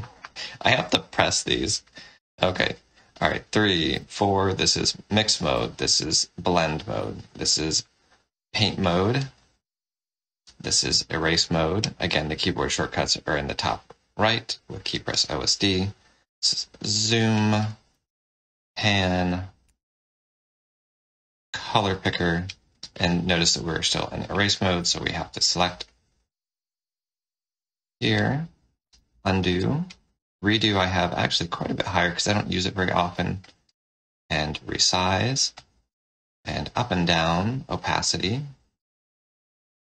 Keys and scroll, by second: 3.2 3, 3.8 4, 4.5 3, 5.4 4, 6.9 1, 10.5 5, 15.7 z, 17.9 space, 24.7 1, 28.8 ctrl+z, 30.8 ctrl+shift+z.